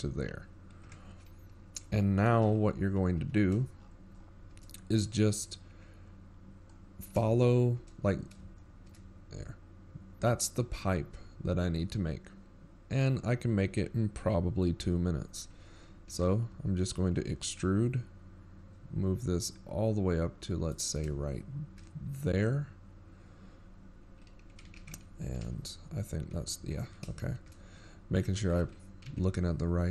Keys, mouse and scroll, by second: 2.5 KP_7, 4.1 KP_1, 4.8 z, 5.4-6.2 shift+scroll down 14, 6.6-7.1 scroll down 3, 8.5 scroll down 4, 9.1-9.5 shift+scroll up 6, 10.4 shift+scroll up 5, 18.0 e, 23.3-24.1 shift+scroll up 10, 24.9 scroll down 5, 26.8 ctrl+KP_3, 27.4 z, 28.1-28.5 scroll up 3, 28.8-29.2 ctrl+scroll down 7, 29.2-29.9 shift+scroll up 11.